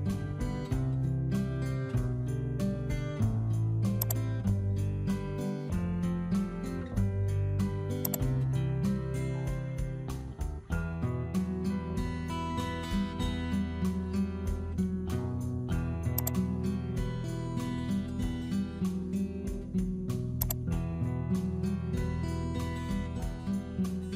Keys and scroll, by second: 5.3 w, 13.2 Right, 18.7 w.